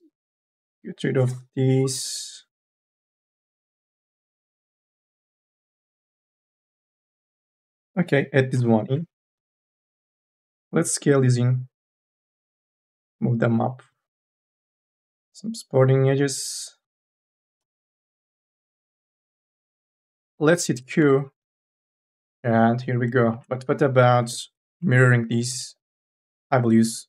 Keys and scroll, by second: 2.1-4.1 typing, 7.5 k, 7.8 l, 8.9 3, 9.4 u, 9.8 l, 10.6 ctrl+z, 12.3 e, 14.4 k, 14.7 l, 16.8 1, 17.4 m, 17.7 o, 19.1 q, 20.8 n, 21.1 a, 23.4 q, 24.0 4, 24.2 e, 26.2 4.